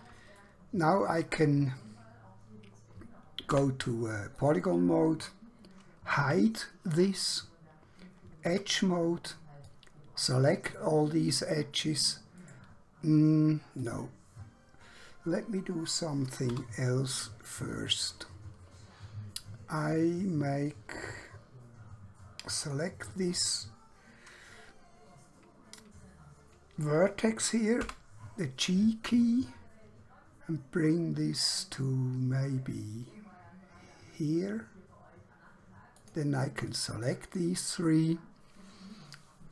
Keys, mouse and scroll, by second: 0.5 shift+middle click, 3.7 3, 4.5 click, 6.2 h, 8.6 2, 9.7 click, 12.5 right click, 13.9 click, 16.5 1, 22.7 click, 27.9 g, 36.0 click.